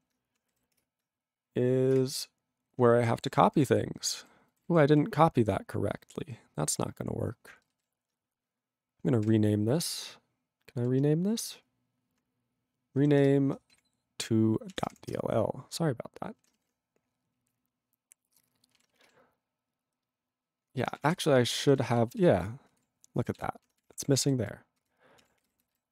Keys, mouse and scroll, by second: 2.0 Return, 3.0 ctrl+=, 3.5 ctrl+n, 4.0 ctrl+n, 4.6 ctrl+n, 4.9 ctrl+e, 7.8 ctrl+alt+b, 9.2 r, 15.2 Return, 18.7 ctrl+g.